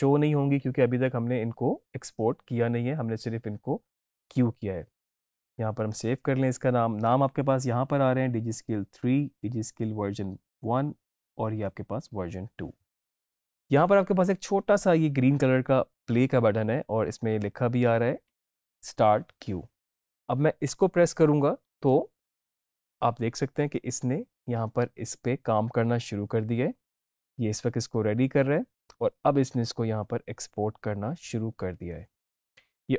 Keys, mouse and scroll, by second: 5.8 click, 21.7 click.